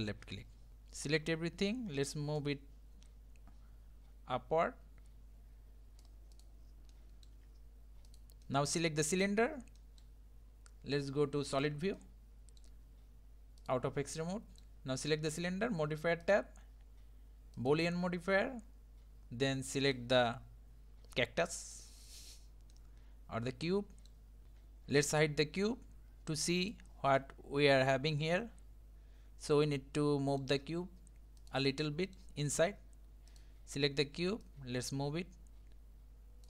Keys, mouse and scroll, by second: 0.0 click, 0.7 middle click, 1.0 a, 2.4 click, 6.4 click, 6.9-7.4 middle drag, 7.4 Tab, 8.1 click, 8.4 middle click, 9.1 click, 9.8-11.5 middle drag, 11.5 click, 12.0-13.6 middle drag, 13.6-14.2 drag, 14.2-16.2 middle drag, 16.2-19.6 drag, 19.8 click, 22.7-24.4 middle drag, 26.6 click, 27.2-30.3 middle drag, 31.4 click, 31.9-33.3 middle drag, 33.3 click, 34.4 click.